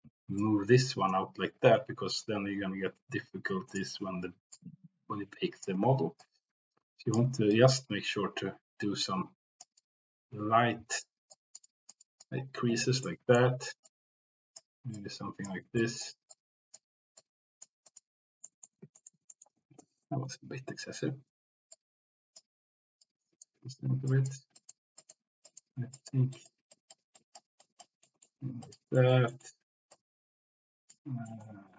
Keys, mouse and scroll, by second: 1.9 ctrl+z, 3.7 click, 4.5-5.6 drag, 6.2 ctrl+z, 6.2 click, 7.5 ctrl+z, 7.5-9.6 drag, 9.7-11.0 drag, 10.2 c, 11.3 click, 11.6 click, 12.0 click, 13.0 middle click, 13.8 click, 14.9 click, 15.7 click, 16.2 click, 17.2 click, 17.8 click, 18.5 middle click, 18.9 shift+middle click, 19.4 middle click, 19.8 ctrl+z, 20.3 ctrl+z, 20.7 ctrl+z, 21.2 ctrl+z, 21.7 click, 23.0 click, 23.8 ctrl+z, 24.1 click, 24.5 middle click, 24.9 middle click, 25.4 click, 25.9 click, 26.3 middle click, 26.6 click, 27.1 click, 27.6 click, 28.0 middle click, 28.6 click, 28.9 middle click, 29.2 middle click, 29.9 middle click, 31.2 middle click.